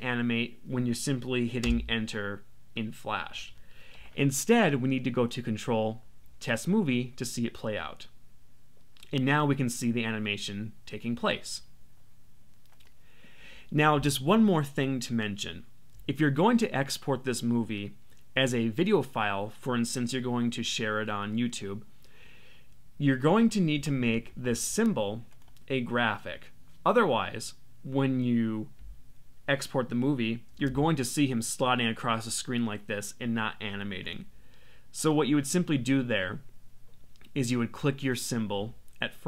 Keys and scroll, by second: 1.6 Return, 30.5 Return.